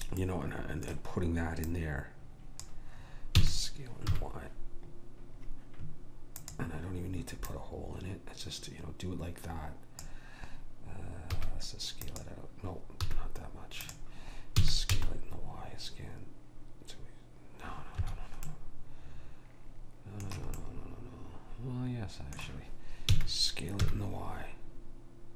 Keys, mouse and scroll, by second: 0.3-2.7 middle drag, 1.8 click, 3.4 s, 7.5 click, 11.4 s, 13.1 s, 14.7 s, 18.6-20.7 middle drag, 23.1 s.